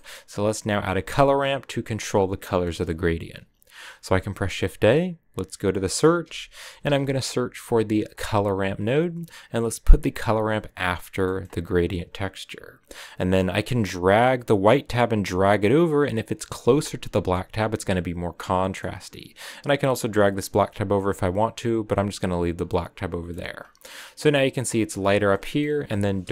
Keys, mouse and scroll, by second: 14.0-17.2 drag, 17.2-18.3 middle drag, 18.3 scroll up 3, 18.6-19.6 middle drag, 19.6-22.6 drag, 22.6 middle click, 23.4-24.1 scroll up 1, 24.1-25.2 drag, 25.2-26.3 middle drag.